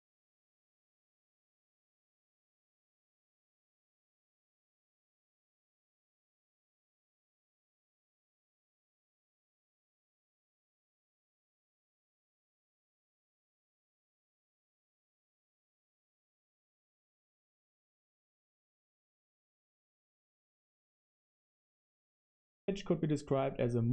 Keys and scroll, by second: 0.0-4.1 typing, 7.7 super+3, 8.5 super+1, 15.0 super+1, 16.0 super+3, 16.7 super+1.